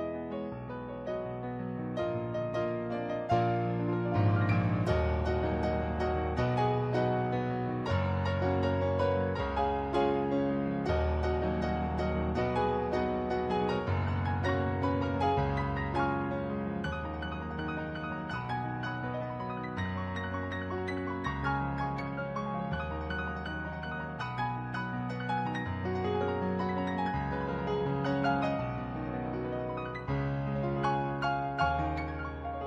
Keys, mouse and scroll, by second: 0.3 ctrl+z, 0.7 ctrl+z, 2.4 ctrl+z, 6.1 ctrl+z, 6.7 ctrl+z, 7.3 ctrl+z, 10.1 ctrl+z, 10.5 ctrl+z, 19.1 ctrl+z, 19.4 ctrl+z, 19.9 ctrl+z, 22.4 ctrl+z, 23.3 ctrl+z, 25.3 ctrl+z, 25.7 ctrl+z, 25.9 ctrl+z, 26.6 ctrl+z, 28.2 ctrl+z, 29.8 ctrl+z, 31.7 ctrl+z, 32.0 ctrl+z, 32.5 ctrl+z.